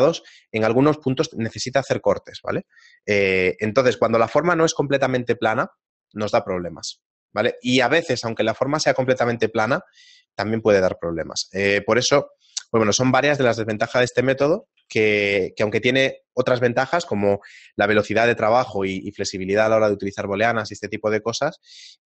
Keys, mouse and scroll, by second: 9.4 shift+middle click, 11.4 middle click, 11.4-12.1 scroll down 4, 12.1 shift+middle click, 13.1 Tab, 13.1 middle click, 15.7 shift+middle click, 15.7 a.